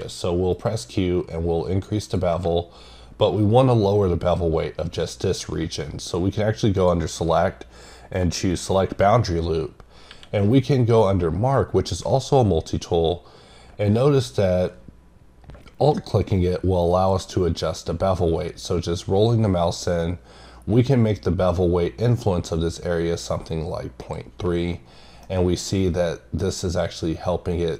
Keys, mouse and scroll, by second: 0.8 click, 2.0 click, 6.8 click, 16.9 click, 24.0 click, 25.0 scroll down 1, 25.2 middle click.